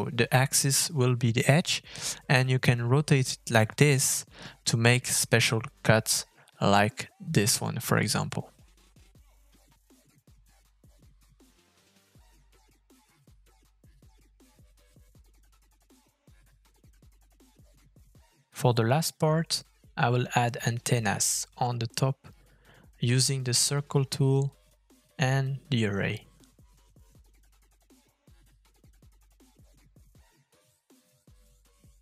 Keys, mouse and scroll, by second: 0.3 middle click, 1.4 shift+middle click, 1.7 middle click, 4.2 middle click, 4.4-4.9 scroll up 2, 4.5 middle click, 4.7 shift+middle click, 4.9 shift+middle click, 5.3 shift+middle click, 5.5 Tab, 6.1 a, 6.6 s, 8.2 Tab, 8.5 middle click, 8.9-9.5 scroll up 3, 9.1 shift+middle click, 9.8 shift+middle click, 10.1-10.5 scroll down 1, 10.5 shift+middle click, 10.9 Tab, 11.4 s, 12.3 Tab, 12.7 middle click, 13.3 shift+middle click, 13.7-14.1 scroll down 3, 13.9 middle click, 14.1 shift+middle click, 15.2 middle click, 15.6 shift+middle click, 16.5 middle click, 17.4 middle click, 17.5 scroll down 2, 17.7 shift+middle click, 17.8 middle click, 18.5 middle click, 20.1 shift+middle click, 20.4 middle click, 20.6 shift+middle click, 21.1 middle click, 22.2 scroll down 1, 22.4 middle click, 23.5 shift+middle click, 23.6 scroll up 2, 23.8 middle click, 24.1 middle click, 24.4 shift+middle click, 24.7 scroll up 1, 24.9 shift+middle click, 25.3 f, 26.6 middle click, 26.8 scroll up 2, 27.0 middle click, 30.5 middle click, 30.9 middle click.